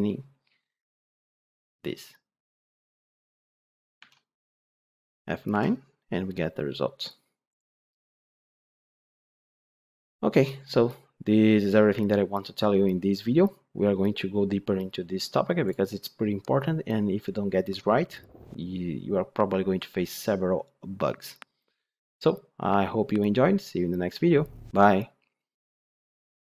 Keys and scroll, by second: 5.4 F9.